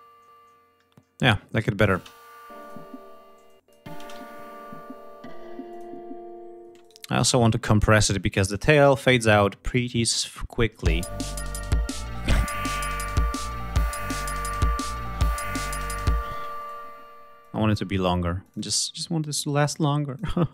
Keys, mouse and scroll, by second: 1.1 click, 1.5 space, 2.1 click, 2.8 space, 3.0 click, 3.5 space, 3.8 ctrl+scroll up 2, 5.2 click, 6.3 space, 6.4 right click, 8.1 click, 10.4 l, 11.4-12.5 drag, 12.7-13.5 drag, 14.7 click, 15.3 click, 15.9 space, 16.1 click, 17.0 click, 18.0 click, 19.3 click.